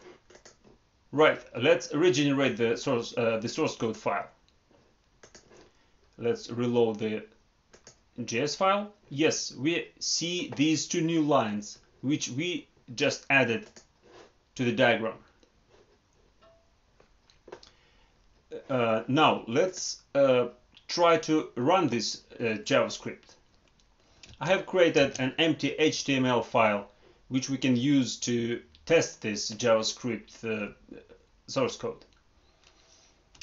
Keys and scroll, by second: 24.2 alt+Tab, 33.3 alt+Tab.